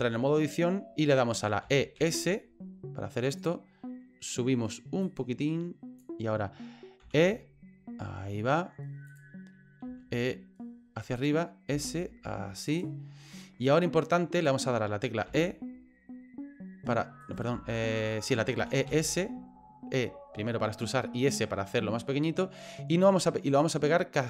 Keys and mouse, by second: 1.6 e, 5.2 click, 7.0 e, 9.9 e, 11.7 s, 13.4 middle click, 15.3 e, 17.5 ctrl+z, 18.6 e.